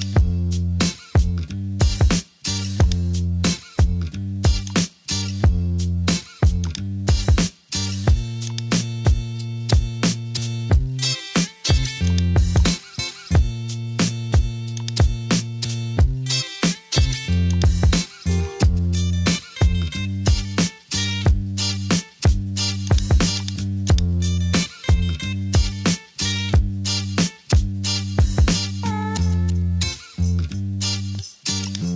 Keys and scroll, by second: 1.5 super+t, 10.1 Return, 11.1 super+j, 13.7 super+t, 16.9 Return, 18.8 Return, 26.1 super+g.